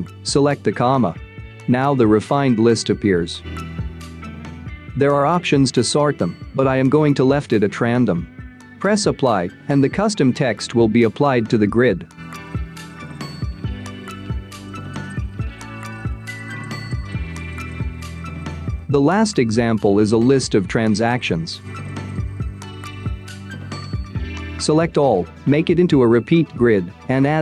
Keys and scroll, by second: 17.4-18.4 space, 19.9-20.6 space.